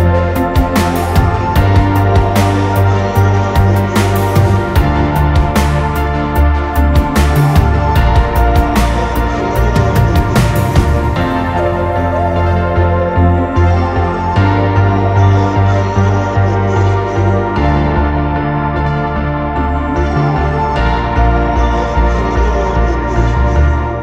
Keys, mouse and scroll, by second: 0.0 scroll up 1, 0.5-1.1 scroll down 2, 0.7 middle click, 1.2 scroll up 1, 1.3 scroll down 1, 2.5 scroll down 1, 2.5-3.7 scroll up 1, 4.4 scroll down 1, 5.4 scroll up 1, 6.7 scroll down 1, 7.5-8.7 scroll up 1, 9.9-10.3 scroll down 1, 10.3-11.6 scroll up 1, 12.1 scroll down 1, 13.2 scroll up 1, 14.0 scroll down 1, 18.7 scroll down 1, 19.5 scroll up 1, 19.8 scroll down 1, 20.0 middle click, 20.8 scroll up 1, 22.9 middle click.